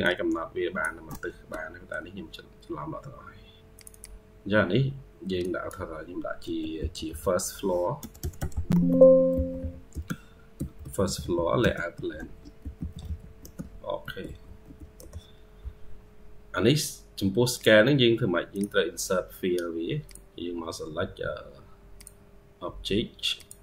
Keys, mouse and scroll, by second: 0.0-0.9 ctrl+q, 1.2 Escape, 3.8 double click, 8.4-8.9 typing, 8.6 Caps_Lock, 10.2-12.5 typing, 14.8 Return, 15.9-16.9 scroll down 1, 17.4 right click.